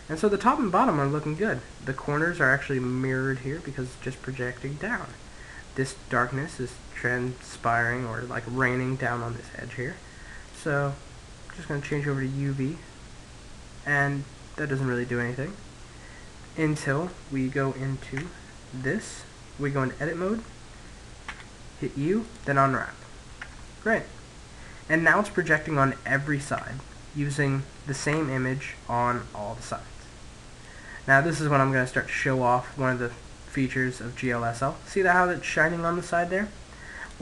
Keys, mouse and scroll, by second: 1.9-5.2 middle drag, 6.9-8.7 middle drag, 10.2 click, 12.3-14.0 middle drag, 16.3-18.2 middle drag, 17.8 Tab, 20.9 u, 23.1 Tab, 23.3 middle click, 25.3 middle click, 26.3 Tab, 27.7 Tab, 28.2-30.0 middle drag, 30.5 middle click, 32.7 middle click, 36.6-37.2 drag.